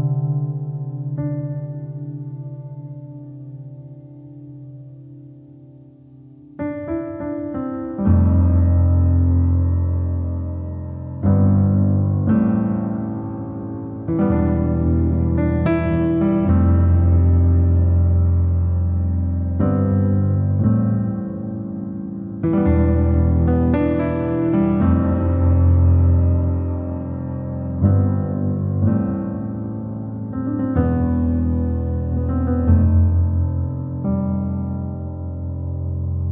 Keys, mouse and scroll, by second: 1.7-3.2 middle drag, 3.2-4.5 drag, 4.5-5.6 middle drag, 5.6 click, 6.2-7.6 shift+middle drag, 7.6 click, 8.0-9.3 middle drag, 9.3 click, 9.6-11.5 middle drag, 11.5 f, 13.3 middle click, 13.6-14.0 scroll up 2, 14.0-15.2 shift+middle drag, 15.2-16.5 drag, 16.5-17.1 scroll down 2, 17.1 middle click, 17.4-17.8 scroll up 1, 17.8-20.1 shift+middle drag, 20.1 f, 21.8-23.2 drag, 24.2 middle click, 24.6 scroll down 1, 25.0 click, 25.8-29.1 middle drag, 29.1-29.7 scroll up 2, 30.4-34.2 middle drag, 34.2 click, 35.1 f.